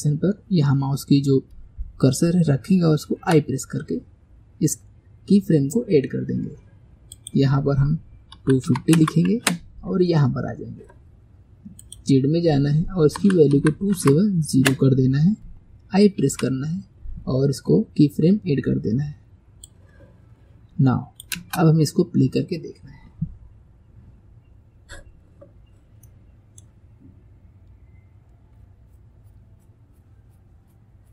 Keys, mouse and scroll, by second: 7.2-10.2 drag, 11.8-17.0 drag, 19.8-21.4 drag, 21.4 space, 26.2-31.1 middle drag.